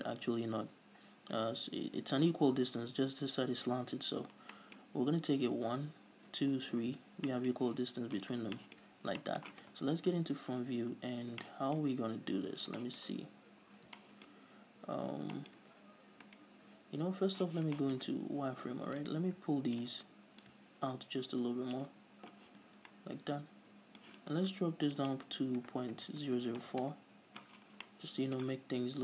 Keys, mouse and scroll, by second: 7.1 scroll down 2, 8.4 scroll down 2, 9.0-9.3 scroll up 2, 10.1 KP_1, 12.0-12.9 scroll up 2, 14.7-17.5 scroll up 6, 16.4 right click, 17.0 middle click, 17.5 z, 17.9-19.1 shift+middle drag, 18.2 Tab, 18.4-19.1 scroll up 2, 19.1-23.0 drag, 22.6 z, 22.8 scroll down 2, 23.0-25.1 middle drag, 25.1-28.0 drag, 26.5 KP_0, 27.1 Return, 28.0-29.0 middle drag.